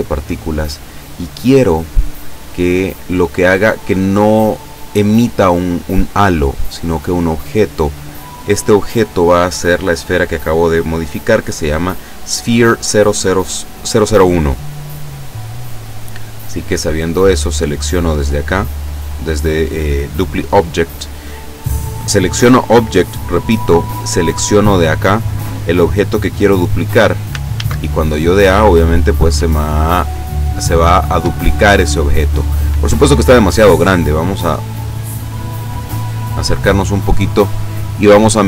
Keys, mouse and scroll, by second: 0.3 click, 1.0-1.8 scroll down 5, 7.1 click, 8.7-9.5 scroll down 2, 10.2 right click, 14.5-15.2 scroll up 2, 15.7 right click, 17.2 click, 18.6 click, 24.6 click, 26.1 click, 27.6 alt+a, 31.2 Escape, 31.8-32.2 scroll down 1, 35.2 click, 36.0-36.5 scroll up 1, 36.6-37.0 scroll down 1.